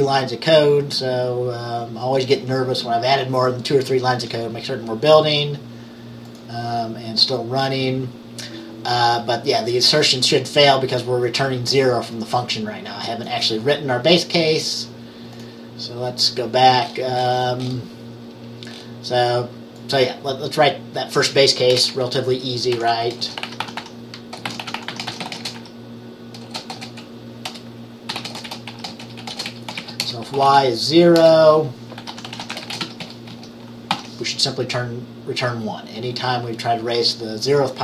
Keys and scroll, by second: 21.8 BackSpace, 22.8-34.5 typing.